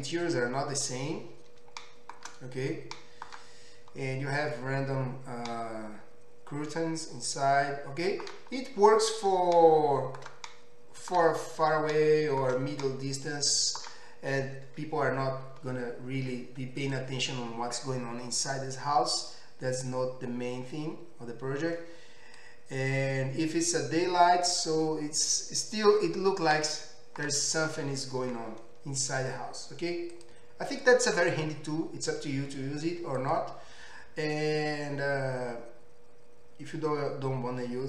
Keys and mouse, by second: 16.8 click, 17.0-19.9 middle drag, 19.9-30.8 drag, 30.8-33.3 middle drag, 33.3-37.8 drag.